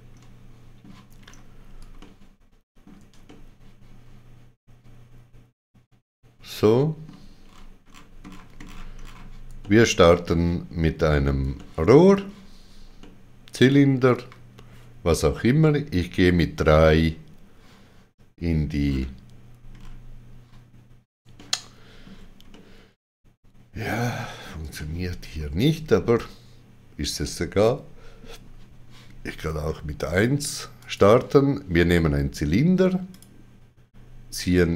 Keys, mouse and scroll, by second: 0.1 middle click, 1.2-1.7 scroll up 2, 1.9 ctrl+middle click, 3.2 ctrl+middle click, 7.4-8.2 scroll down 7, 9.6 shift+middle click, 10.7 shift+middle click, 11.5 shift+middle click, 12.9 shift+middle click, 15.6 Page_Down, 18.8-19.7 scroll down 6, 20.2-21.2 scroll down 1, 21.3 shift+middle click, 30.8 click, 33.1 click.